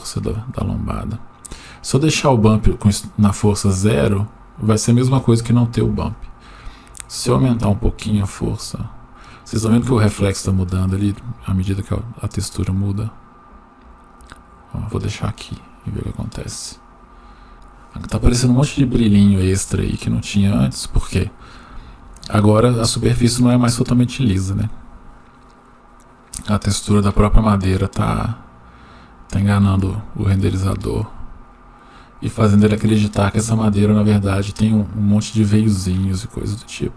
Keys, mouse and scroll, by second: 1.6-2.1 drag, 6.1-14.0 drag, 28.2-30.4 drag.